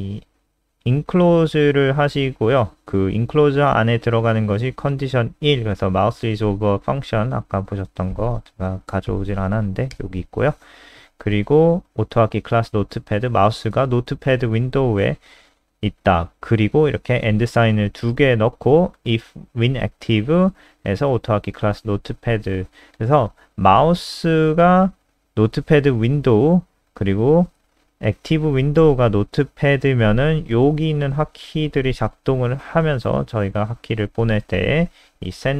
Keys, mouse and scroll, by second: 1.0 ctrl+click, 2.0 click, 5.2-6.2 scroll down 1, 6.2 click, 6.5 scroll down 2, 8.0 ctrl+c, 8.2 click, 9.0 ctrl+End, 9.2 Return, 9.5 ctrl+v, 9.6 ctrl+s, 10.6 click.